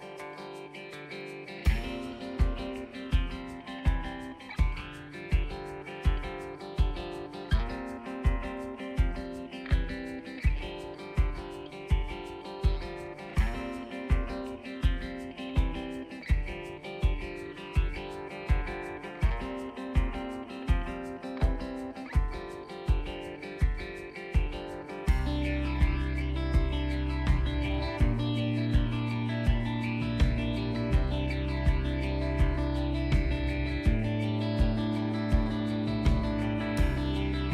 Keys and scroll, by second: 2.3 ctrl+=, 6.6 ctrl+z, 24.5 ctrl+-, 25.0 ctrl+-, 28.7 ctrl+=.